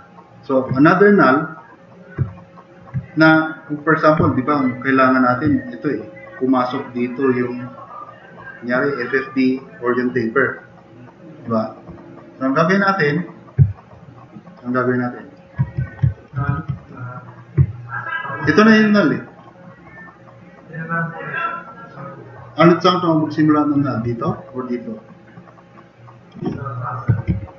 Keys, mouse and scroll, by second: 4.3 drag, 13.7 drag, 14.1 drag, 14.5-15.3 drag, 27.3 super+=.